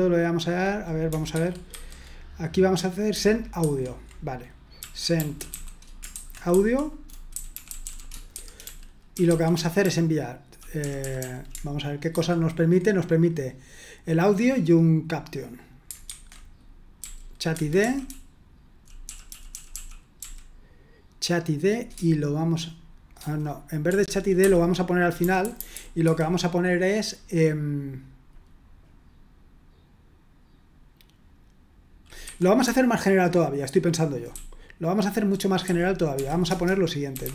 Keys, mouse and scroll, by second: 1.3 super+1, 1.7 super+2, 3.6 super+1, 4.6-10.8 typing, 12.1 typing, 16.1 super+1, 17.0-20.2 typing, 17.5 Escape, 23.9 Escape, 24.4-26.5 typing, 32.2 Escape, 32.6-37.3 typing, 36.4 Return.